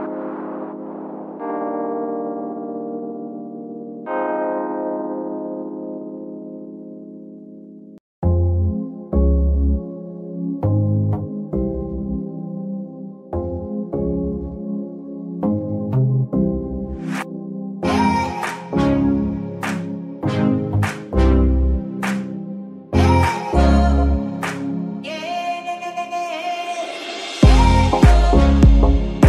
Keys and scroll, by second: 5.8 ctrl+Tab, 6.5 z, 11.2 g, 11.4 Escape, 11.8 g, 12.1 Escape, 14.2 g, 14.4 Escape, 16.3 g, 16.5 Escape, 17.8 g, 18.0 Escape, 20.0 g, 20.3 Escape, 22.2 g, 22.5 Escape, 24.9 g, 25.2 Escape, 26.7 g, 27.0 Escape, 28.9 g.